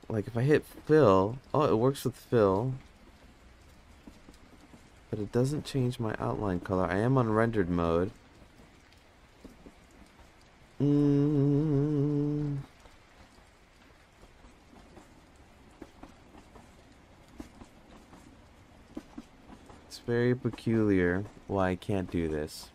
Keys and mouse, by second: 0.7 click, 2.1 click, 3.0 click, 3.3 click, 5.0 click, 5.2 click, 5.4 click, 5.7 click, 5.8-6.2 drag, 10.6-11.0 middle drag, 12.2 click, 14.1-14.6 drag, 15.2-15.7 drag, 16.9-17.4 drag, 19.3 Tab.